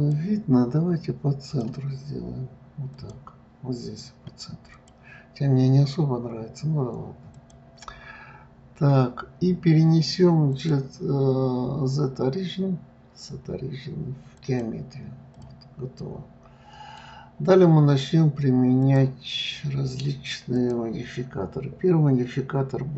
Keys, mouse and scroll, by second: 1.5-4.5 drag, 4.7 click, 7.3 click, 10.5-13.6 drag, 15.3 click, 16.0-17.0 middle drag, 17.0-17.7 scroll down 3, 17.7-18.7 scroll up 1, 18.8 click, 20.5-22.9 drag.